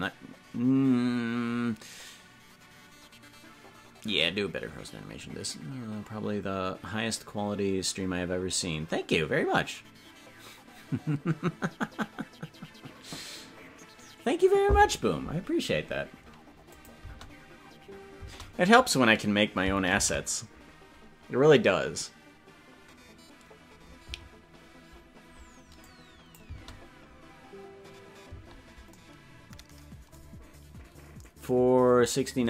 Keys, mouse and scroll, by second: 16.8 click, 16.9 space, 22.5 ctrl+s, 25.9 click, 26.5 space.